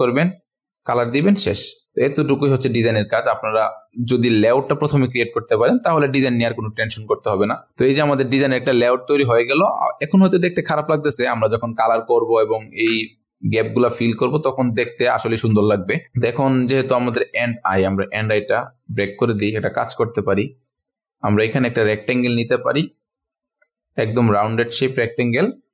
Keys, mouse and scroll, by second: 4.9 shift+Down, 5.3 click, 6.3-7.5 ctrl+alt+scroll down 1, 7.5 scroll down 1, 7.8-9.0 drag, 9.4-11.4 scroll down 1, 11.6-12.3 ctrl+alt+scroll down 1, 12.4 ctrl+alt+scroll up 1, 13.3 click, 14.2 ctrl+scroll down 1, 16.0-16.4 scroll up 1, 16.7 ctrl+alt+scroll up 1, 17.3 click, 17.7 right click, 18.7 click, 19.2 ctrl+alt+scroll down 1, 19.9 click, 21.4 right click, 22.1-23.8 drag, 24.7-25.7 drag, 25.5 v.